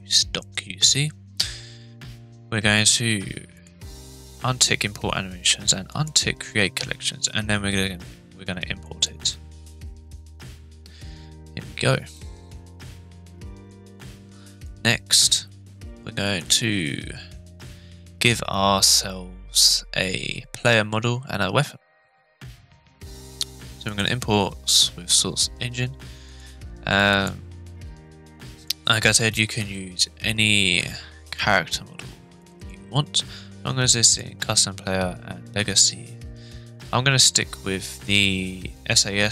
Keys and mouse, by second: 12.1-12.8 middle drag, 13.5 click, 14.8 click, 16.5-22.3 drag.